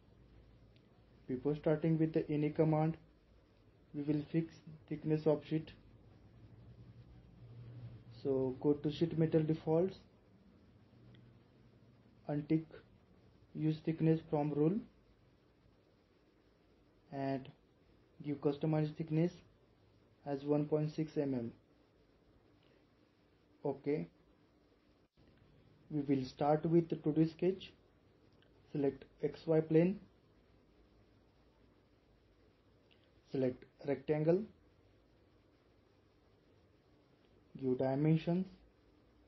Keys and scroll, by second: 20.9-21.8 typing.